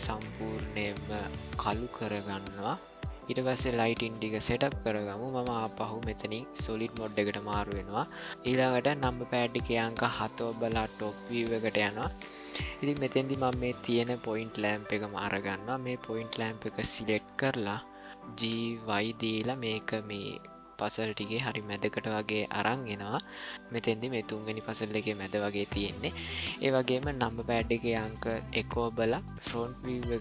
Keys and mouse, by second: 9.7 KP_7, 11.4 ctrl+middle click, 13.5 ctrl+middle click, 15.4 click, 18.3 g, 22.0 g, 25.5-26.7 middle drag, 28.5 KP_1, 29.7-30.2 ctrl+middle drag.